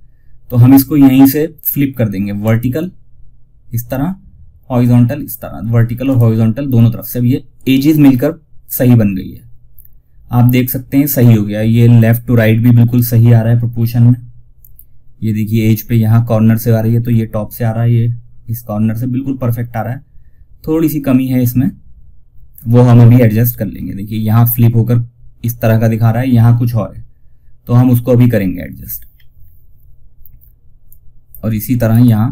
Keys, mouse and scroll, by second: 1.7 click, 5.4 click, 8.1 scroll down 1, 28.4 scroll down 1, 30.2 click, 31.1-31.4 scroll up 1.